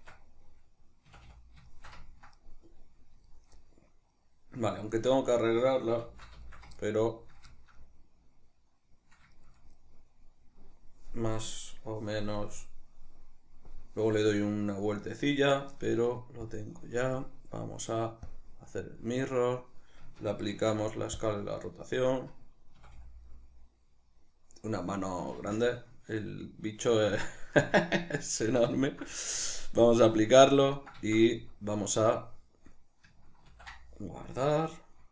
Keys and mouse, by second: 1.1 a, 1.7 shift+middle click, 2.4-11.5 middle drag, 6.0 shift+c, 11.5 right click, 12.3-16.6 drag, 17.2-23.3 drag, 20.5 ctrl+a, 22.8 a, 23.3-29.8 middle drag, 29.8-30.8 drag, 30.8-35.1 ctrl+shift+middle drag, 31.3 z, 33.5 ctrl+s.